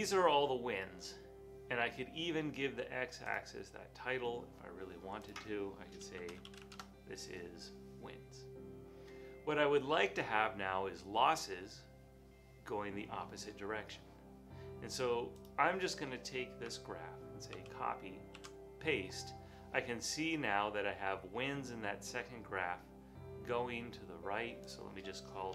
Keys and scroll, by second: 6.0-7.1 typing, 9.8 typing, 17.6 super+c.